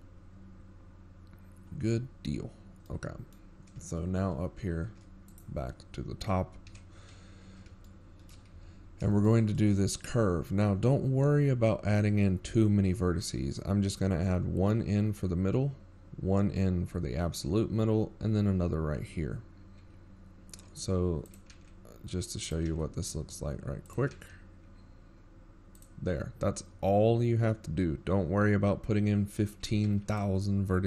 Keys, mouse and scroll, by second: 0.3 scroll down 7, 1.1 z, 1.5 scroll down 3, 2.6 scroll down 1, 2.6 KP_7, 4.2-4.7 scroll up 4, 5.4 scroll down 3, 5.9 middle click, 6.5-7.0 scroll down 3, 8.0-8.4 shift+scroll up 17, 8.4 right click, 9.8 KP_1, 11.0 shift+middle click, 11.7 z, 11.9-12.3 scroll up 3, 12.4 shift+middle click, 13.2-13.8 scroll up 3, 22.8-23.8 scroll up 2, 23.8 e.